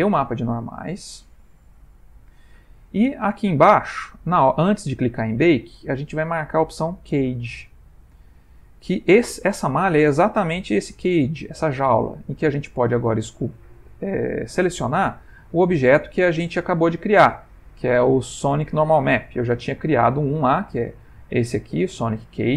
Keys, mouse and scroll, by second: 1.3 middle click, 4.3 middle click, 7.8 click, 22.3 click.